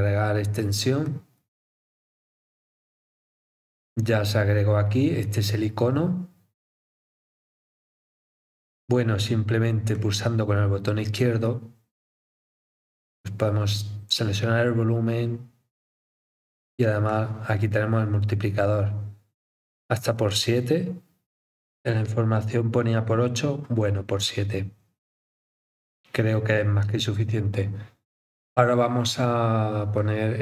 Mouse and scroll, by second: 1.0 click, 9.9 click, 12.9-14.9 drag, 17.1-18.8 drag, 23.3 scroll down 3, 30.0 click.